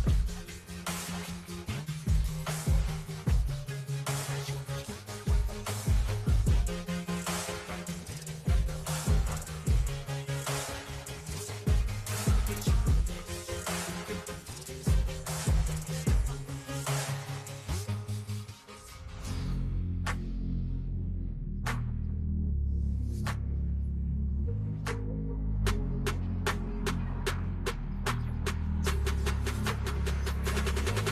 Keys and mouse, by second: 2.5 click, 4.4 click, 5.8 click, 7.3 click, 10.1 click, 12.3 click, 13.1 v, 14.2 click, 16.5 Down, 18.0 shift+Down, 18.2 shift+Down, 18.4 shift+Down, 18.5 shift+Down, 18.7 shift+Down, 18.8 shift+Down, 19.0 shift+Down, 19.4 shift+Down, 19.6 shift+Down, 20.0 shift+Down, 20.8 Return, 26.4 click, 28.2 click, 29.4 Return, 30.3 click.